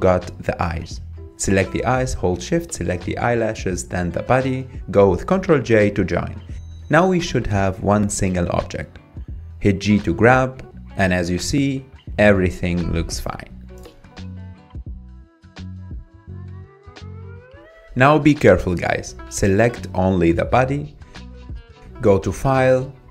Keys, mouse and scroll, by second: 0.0 scroll up 4, 0.3 shift+middle click, 0.8 scroll up 3, 1.6 click, 2.6 shift+click, 3.3 shift+click, 4.6 ctrl+j, 5.8-6.6 middle drag, 6.6 scroll down 4, 7.1 click, 7.4 scroll down 4, 7.7-9.1 shift+middle drag, 9.6-10.0 drag, 10.0-10.6 middle drag, 10.6 click, 10.9-11.4 scroll down 1, 11.4 scroll down 1, 12.1 g, 14.2-15.1 middle drag, 15.1 click, 16.0 drag, 16.4-19.4 middle drag, 19.4 scroll down 1, 19.7-23.1 middle drag.